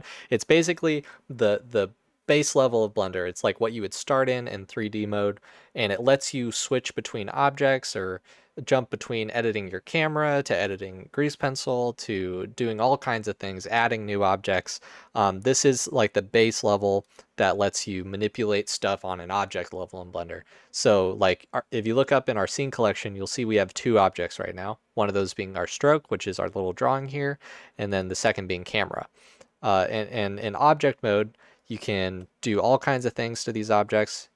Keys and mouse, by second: 31.7 shift+middle click, 33.0-34.1 middle drag.